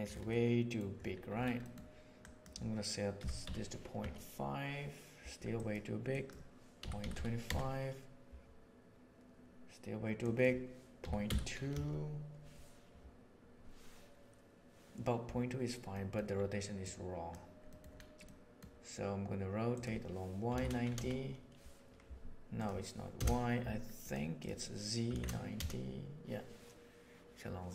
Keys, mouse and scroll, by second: 0.3 middle click, 1.6 middle click, 2.3 click, 7.4-9.3 drag, 10.2-15.4 drag, 15.9 middle click, 16.8 click, 17.7 middle click, 18.3 middle click, 19.7-24.0 drag, 24.5-27.7 drag.